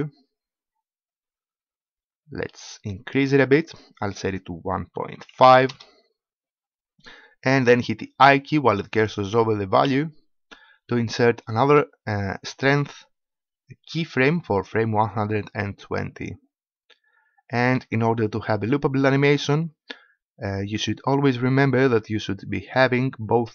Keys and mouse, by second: 9.8 i, 21.2-23.0 drag.